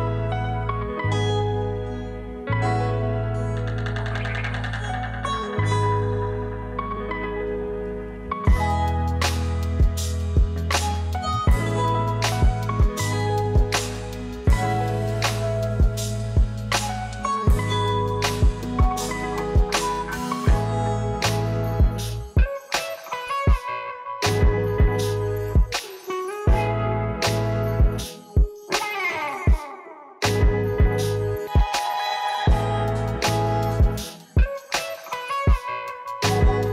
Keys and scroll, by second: 1.3 ctrl+v, 6.6 ctrl+c, 9.5 Page_Down, 13.3 ctrl+v, 19.2 Delete, 21.3 u, 22.7 0, 25.9 0, 29.0 0, 30.0 ctrl+s.